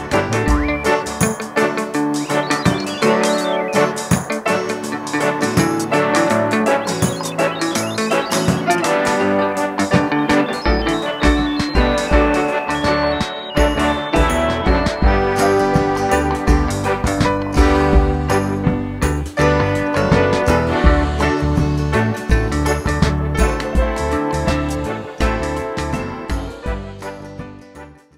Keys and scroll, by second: 0.9 BackSpace, 4.1 super+c, 4.3 super+v, 8.4 BackSpace.